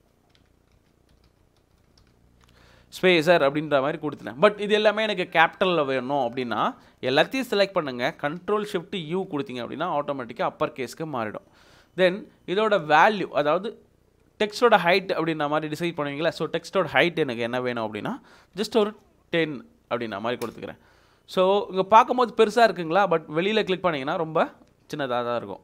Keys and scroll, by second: 0.9-2.5 typing, 18.3-19.3 typing, 20.4 Return.